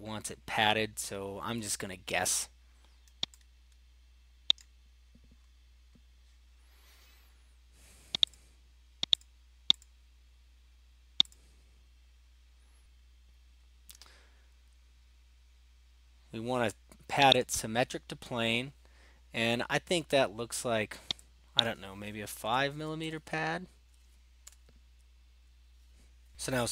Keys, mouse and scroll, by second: 4.5 middle click, 4.6 right click, 5.1 scroll down 2, 5.3 scroll up 1, 5.4-6.2 scroll, 8.4 click, 9.3 click, 9.8 click, 11.3 click, 17.4 click, 21.7 click, 22.5-23.2 typing, 24.4 Return.